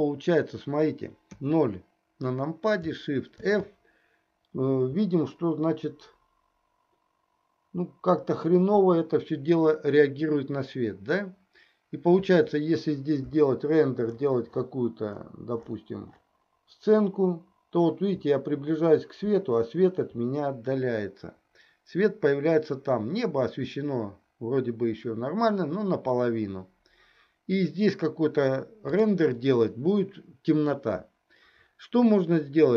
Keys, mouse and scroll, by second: 1.5 KP_0, 3.5 shift+f.